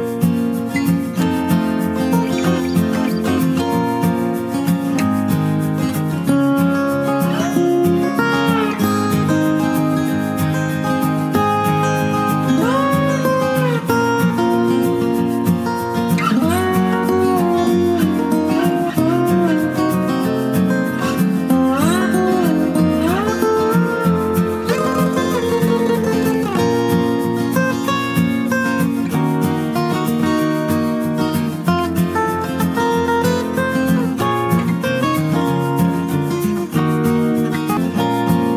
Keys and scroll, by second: 14.0 ctrl+space, 14.4 ctrl+space, 14.4 ctrl+space, 14.7 ctrl+space, 19.0 ctrl+space.